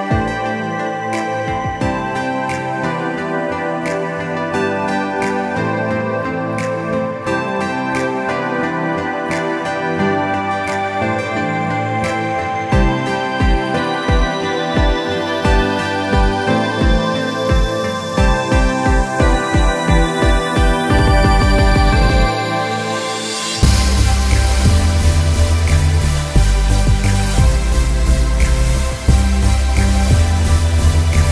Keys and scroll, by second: 0.5 x, 7.4 space, 8.8 b, 9.5 alt+x, 14.5 space, 17.9 space, 18.8 space, 20.3 space, 20.8 space, 22.5 ctrl+j, 23.1 ctrl+t, 28.0 ctrl+t, 29.4 ctrl+Return, 30.4 ctrl+u.